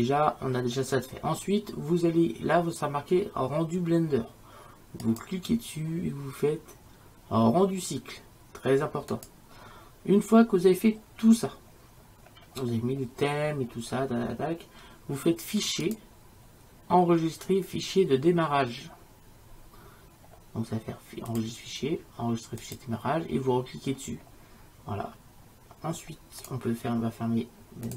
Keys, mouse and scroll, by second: 5.1-7.3 drag, 15.5 middle click, 15.9-17.6 drag, 17.7 click, 21.4-23.2 drag, 23.4 middle click, 24.1-24.7 drag.